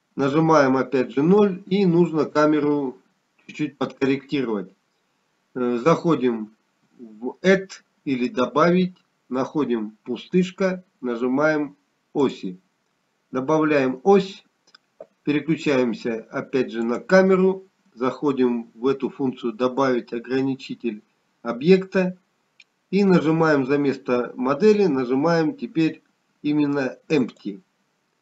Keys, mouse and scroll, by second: 4.1 KP_0, 11.6 click, 19.9 click, 25.9 click.